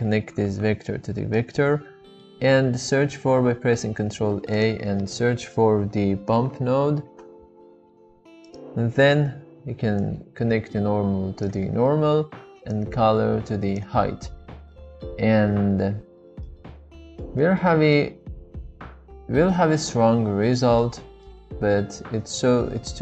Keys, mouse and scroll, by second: 2.2 middle click, 3.9 shift+a, 6.9-8.7 drag, 10.0-11.5 drag, 13.6 click, 17.0-17.7 shift+middle drag, 18.0-19.5 middle drag, 20.8-21.3 middle drag.